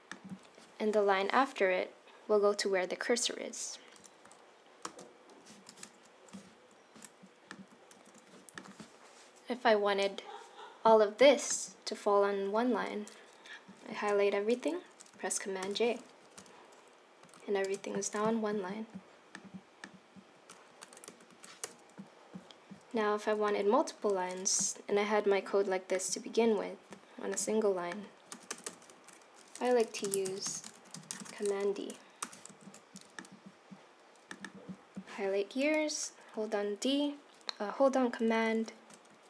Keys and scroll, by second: 4.8 super+j, 7.9 super+z, 15.6 super+j, 17.2 Left, 17.6 space, 20.7 Left, 21.0 Right, 21.3 Right, 21.6 BackSpace, 24.1 super+c, 28.3 Return, 28.5 Return, 28.6 Return, 28.9 Up, 29.5-31.2 typing, 32.2 Return, 32.5 super+v.